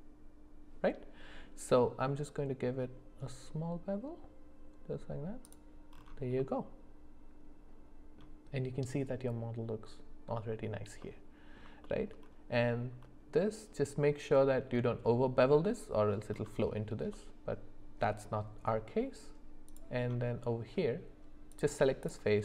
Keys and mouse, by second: 6.4-8.2 middle drag, 11.0 middle click, 11.8 shift+middle click, 17.1-18.3 middle drag, 19.7 click, 21.5 click.